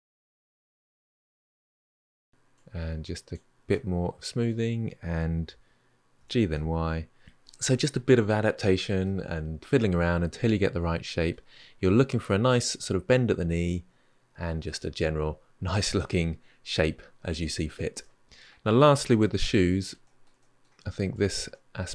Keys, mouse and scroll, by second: 0.0 Tab, 0.1 middle drag, 0.3 click, 0.6 q, 1.2 click, 1.8 q, 2.3-3.5 drag, 3.5-6.0 middle drag, 6.0 g, 7.5 middle click, 8.3 Tab, 8.6-9.8 scroll down 4, 9.8-11.8 middle drag, 13.3-16.4 middle drag, 17.8-18.9 middle drag, 18.9 Tab, 19.3-20.9 middle drag, 20.9 click, 21.3-21.9 middle drag.